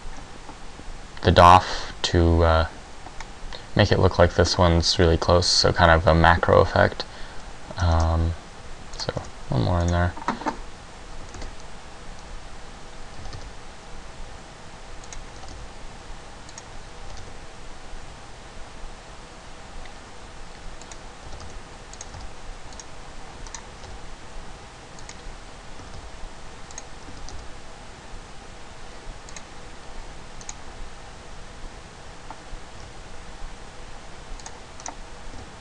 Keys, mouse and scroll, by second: 8.5 shift+d, 9.2 click, 9.4 s, 10.1 click, 12.1 ctrl+z, 13.2 g, 15.3 click, 15.5 g, 16.7 click, 17.3 g, 20.9 click, 21.4 g, 22.1 click, 22.1 g, 22.9 click, 23.7 right click, 23.9 g, 25.2 click, 25.9 r, 26.7 click, 27.1 r, 29.5 click, 30.7 right click, 32.9 r, 34.5 click, 35.1 right click, 35.5 r.